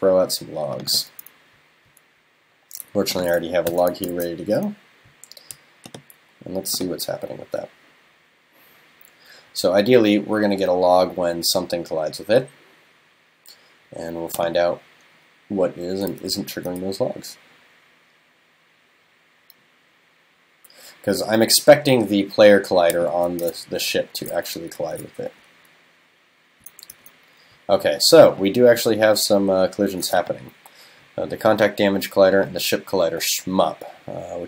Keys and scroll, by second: 3.7 super+/, 4.1 super+s.